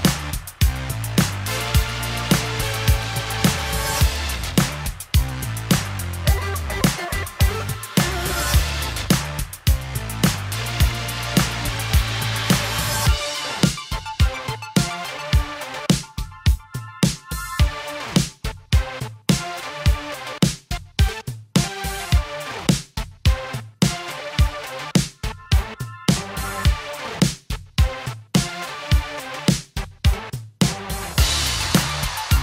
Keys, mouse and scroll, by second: 2.7-4.3 middle drag, 6.3 click, 6.8 Tab, 7.7 alt+a, 8.2 click, 8.7 shift+click, 9.7 shift+click, 10.5 g, 10.7 z, 13.2 click, 13.6 click, 15.3 click, 16.7 click, 17.3 g, 17.6 z, 19.6 click, 20.5 g, 20.9 z, 22.5 click, 23.0 click, 23.5 g, 23.8 z, 24.8 click, 26.2 middle click, 26.5 click, 27.5 click, 28.3 click, 29.6 click, 31.3 click, 32.0 g, 32.3 z.